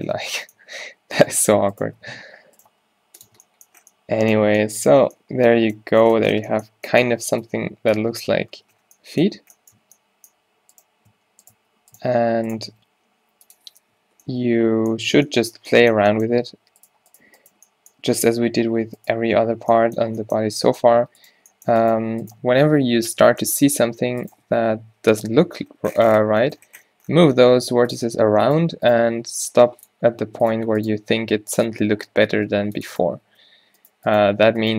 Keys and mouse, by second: 0.2 Tab, 1.0 Tab, 2.8 g, 3.3 Tab, 6.5 Tab, 7.9 a, 8.1 b, 8.1 q, 8.7 Tab, 10.6 Tab, 12.8 g, 13.4 click, 14.0 o, 15.1 Tab, 16.4 Tab, 18.1 g, 19.3 Tab, 19.7 Tab, 20.7 Tab, 21.0 Tab, 23.1 o, 23.6 g, 24.7 o, 25.5 g, 28.6 click, 29.0 g, 29.2 g, 29.4 right click, 30.7 right click, 31.1 g, 31.8 Tab, 32.4 Tab, 32.7 ctrl+r, 33.1 s, 34.5 g.